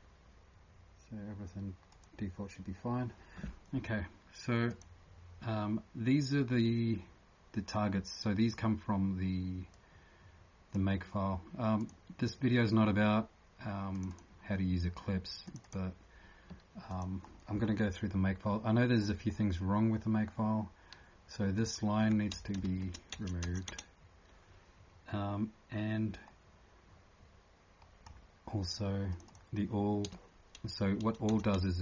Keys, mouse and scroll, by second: 4.7 click, 9.7 click, 11.8 click, 16.9 click, 17.3 scroll down 1, 18.4 scroll down 1, 21.3-21.6 scroll down 20, 21.5 click, 22.7 shift+Home, 23.1 BackSpace, 23.4 BackSpace, 23.7 BackSpace, 26.2 scroll up 1, 29.1 click, 29.1 scroll up 8, 31.3 click, 31.3 BackSpace.